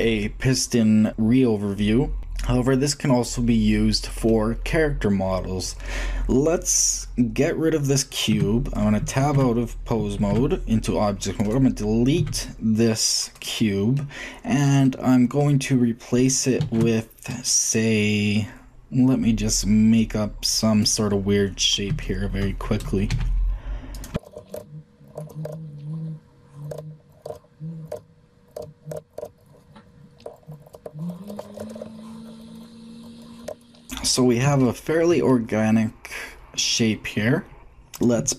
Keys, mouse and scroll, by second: 0.6-1.9 middle drag, 3.3 middle click, 4.1-4.6 scroll up 1, 4.6-5.7 scroll up 1, 5.7 scroll up 1, 8.1 Tab, 9.0 ctrl+Tab, 10.3 ctrl+Tab, 11.2 ctrl+click, 12.0 x, 13.7-15.4 middle drag, 16.1 shift+click, 16.4 shift+a, 17.9-19.8 middle drag, 21.3-23.0 middle drag, 22.9 s, 24.2 g, 24.5 shift+d, 25.4 shift+d, 25.6 click, 27.1-29.1 typing, 28.8-29.3 shift+drag, 29.6 shift+drag, 31.5 ctrl+shift+j, 32.4 click, 33.4 Tab, 33.9-35.2 shift+middle drag, 37.5 shift+g, 37.9-38.3 shift+middle drag.